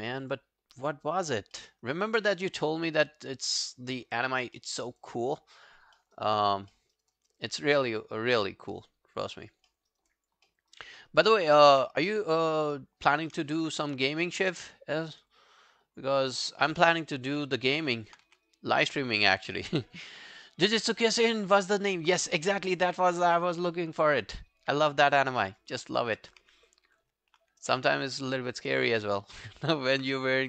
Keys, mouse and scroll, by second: 0.1 alt+right click, 0.3 alt+click, 1.6 alt+middle click, 1.9 alt+right click, 2.1 alt+click, 2.8 shift+click, 3.5 shift+click, 4.0 scroll down 1, 4.2 alt+click, 4.6 alt+middle click, 4.8 alt+right click, 5.0 alt+click, 5.9 alt+click, 6.0 alt+middle click, 6.2 alt+right click, 6.4 alt+click, 6.7 alt+middle click, 7.0 alt+right click, 7.1 alt+click, 8.0 alt+scroll down 1, 8.2 alt+click, 9.2 alt+click, 9.7 alt+middle click, 9.9 alt+right click, 10.1 alt+click, 10.5 alt+middle click, 10.7 alt+right click, 11.0 alt+middle click, 11.2 alt+right click, 11.4 alt+click, 12.1 shift+right click, 13.6 alt+click, 17.4 alt+middle click, 17.7 alt+scroll down 1, 17.9 alt+click, 18.3 w, 18.5 right click, 24.7 scroll down 2, 25.0 alt+click, 25.4 alt+middle click, 25.6 alt+right click, 25.9 alt+click, 27.0 ctrl+i, 27.5-28.5 ctrl+scroll down 3, 27.8 alt+click, 28.5 alt+click, 28.8 alt+right click, 29.0 alt+click, 29.5 alt+middle click, 29.8 alt+right click.